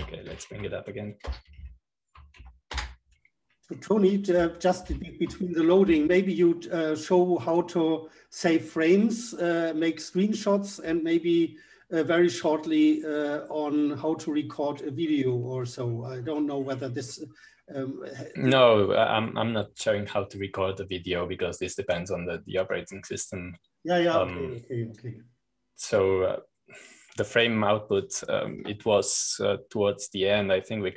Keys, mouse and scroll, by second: 1.5 super+-, 2.4 Up, 3.1 BackSpace, 3.5 ctrl+c, 4.3 Up, 4.7 Return, 6.8 super+-, 9.5-10.6 drag, 11.7-13.7 scroll down 1, 13.7-15.3 scroll down 1, 15.3-15.8 scroll down 1, 17.8-20.2 scroll up 1, 23.2-30.0 drag, 30.0-30.9 scroll down 2.